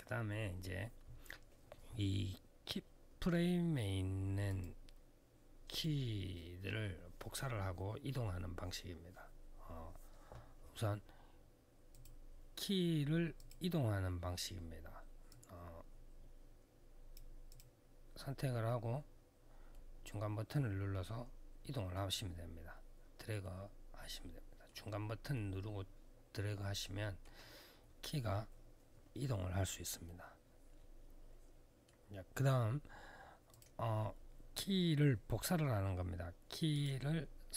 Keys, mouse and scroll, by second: 4.2 click, 5.5 click, 11.7 click, 13.1 click, 15.0 click, 17.2 click, 17.3 click, 19.5 middle click, 25.1 middle click, 29.8 middle click, 33.3 click, 36.5 click.